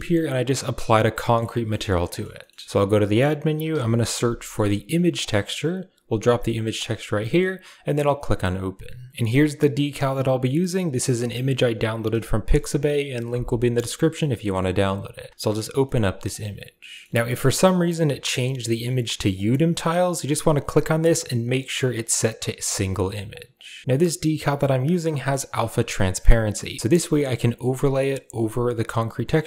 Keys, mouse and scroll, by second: 0.7-1.2 middle drag, 1.3 a, 1.9 middle click, 2.2 middle click, 2.6 shift+a, 6.8 middle drag, 7.6 click, 9.1-14.4 drag, 15.1 click, 15.6 middle click, 16.1 click, 17.1 n, 17.7 click, 19.1-20.3 drag, 20.8-22.6 drag, 23.1 click.